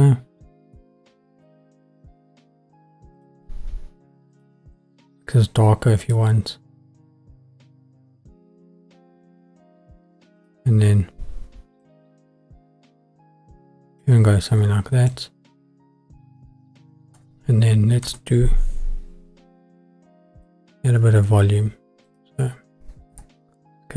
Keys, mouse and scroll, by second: 0.4-1.5 scroll down 3, 1.5 middle click, 1.7 scroll down 1, 3.2 click, 3.2 scroll up 1, 6.0 click, 10.4 click, 15.1 click, 18.0 shift+a, 22.2-23.1 drag, 23.1 s.